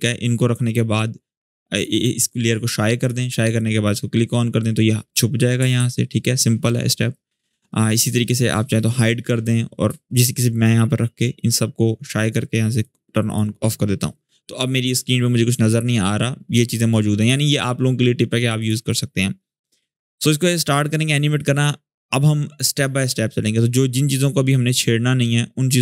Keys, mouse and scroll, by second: 5.5 ctrl+z, 8.2-9.5 drag, 16.9 click.